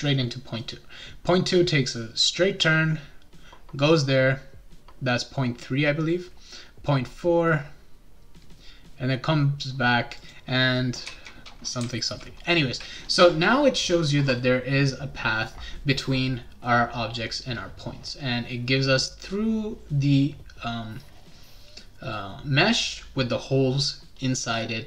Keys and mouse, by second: 10.2 click, 11.8 w.